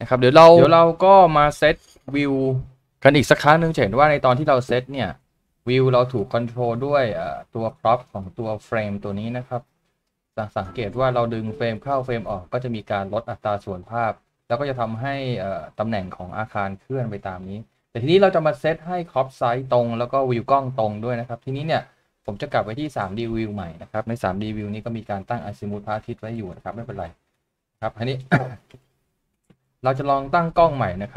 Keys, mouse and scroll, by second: 24.7 shift+middle click, 25.9 scroll up 1, 26.1 middle click, 28.3 middle click.